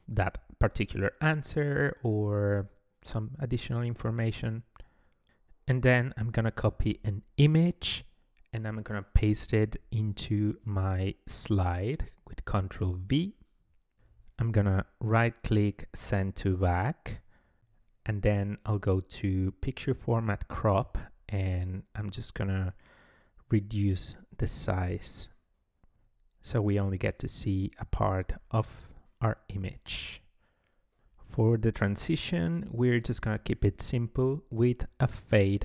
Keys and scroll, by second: 9.5 ctrl+v, 12.5 ctrl+v.